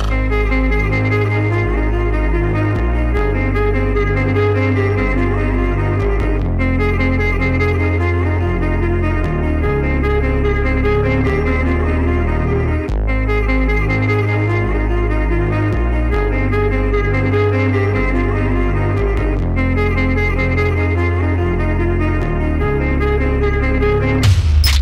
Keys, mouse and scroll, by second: 1.1 click, 10.1 right click, 10.6 click, 13.8 click, 14.1 shift+click, 18.5 double click, 19.6 click, 20.7 alt+scroll down 1, 21.0 alt+scroll up 1, 21.3 click, 23.0 right click, 23.9 click.